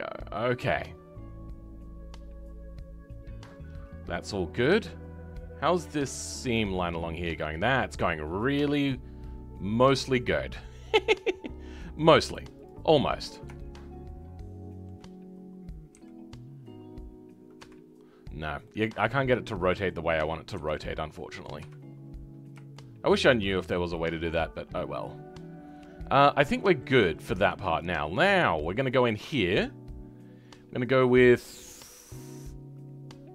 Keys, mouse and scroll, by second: 10.5-10.9 scroll down 2, 10.9-12.6 middle drag, 12.6 click, 12.9-13.6 scroll up 2, 13.6-15.9 shift+middle drag, 15.9 r, 18.3 scroll down 2, 18.6-20.6 middle drag, 20.6 r, 22.4-22.7 scroll down 1, 22.7-27.3 shift+middle drag, 27.3 Tab, 28.0 scroll down 2, 28.3-33.3 middle drag.